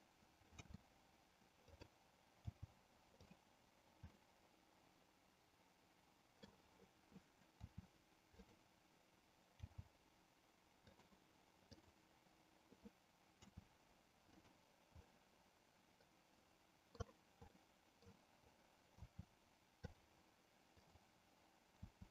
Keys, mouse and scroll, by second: 0.6 r, 1.8 click, 2.6 g, 4.2-6.5 middle drag, 7.6 r, 9.6 g, 11.8 click, 13.3 r, 14.4 click, 15.1-17.1 middle drag, 17.5 middle click, 19.1 r, 20.0 click, 20.7 click, 21.8 r.